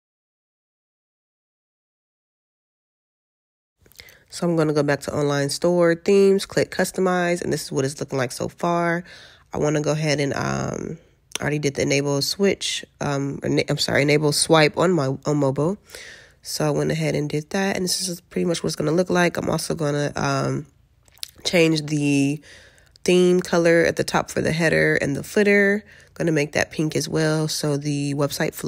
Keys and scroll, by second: 22.0 alt+q.